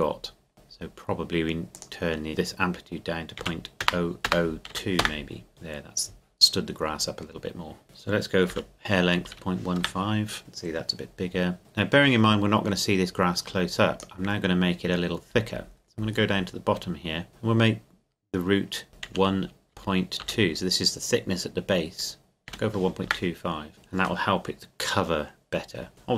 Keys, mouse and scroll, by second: 0.0-0.3 scroll down 1, 1.7 click, 3.4 KP_Decimal, 3.9 KP_0, 4.7 KP_2, 5.0 KP_Enter, 7.8 click, 8.5 KP_Decimal, 9.1 KP_1, 9.3 KP_5, 9.8 KP_Enter, 11.6 click, 14.9 scroll up 1, 15.0-15.5 scroll down 1, 16.8-17.3 scroll up 1, 17.3 click, 19.8 KP_Decimal, 20.2 KP_2, 22.5 KP_5, 23.1 KP_Enter.